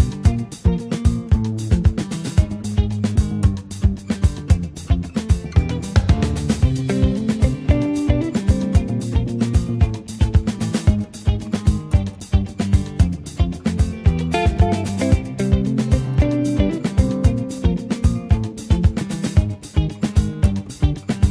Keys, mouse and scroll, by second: 0.1 click, 2.5 click, 3.8 Tab, 4.2 click, 4.6-5.6 middle drag, 5.6-16.3 drag, 16.3-17.9 right drag, 17.9-20.9 drag, 20.9-21.3 scroll up 3.